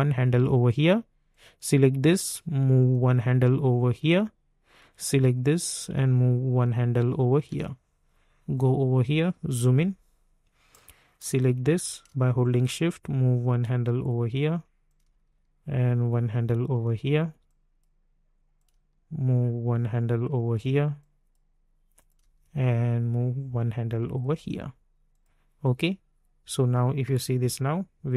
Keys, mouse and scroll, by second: 1.3-4.7 drag, 4.7-8.5 drag, 9.4 typing, 10.7-14.8 drag, 14.8-17.4 drag, 17.4-21.0 drag, 21.0-27.0 drag, 27.0 space.